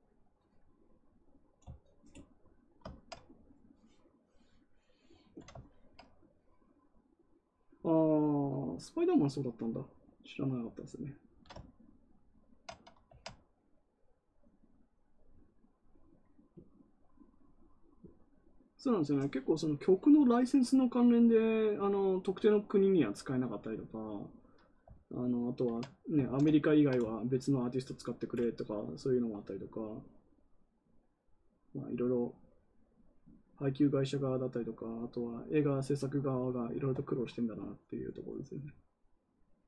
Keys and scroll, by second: 26.2 ctrl+z.